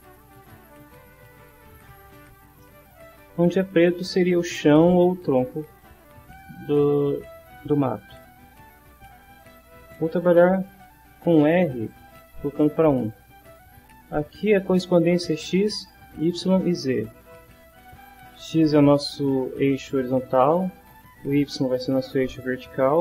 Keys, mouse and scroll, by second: 2.6 shift+middle click, 9.4 click, 11.9-14.2 drag.